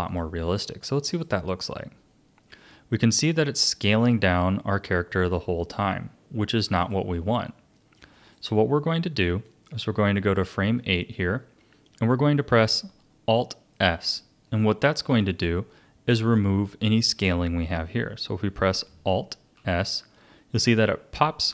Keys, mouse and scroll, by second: 0.1-4.1 drag, 6.8-11.1 drag, 11.1-16.7 shift+middle drag, 19.5 alt+s.